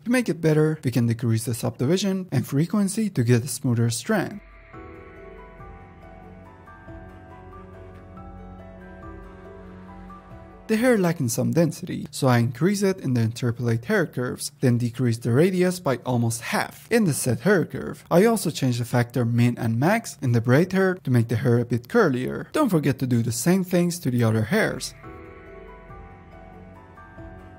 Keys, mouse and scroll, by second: 1.6-2.7 drag, 4.6 click, 23.0-26.0 drag, 27.2-27.5 drag.